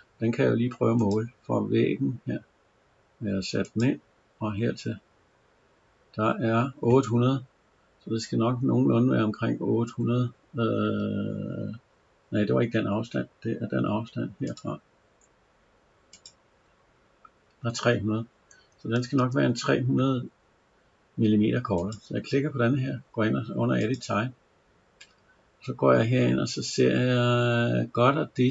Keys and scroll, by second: 9.7 Escape, 18.8 Escape.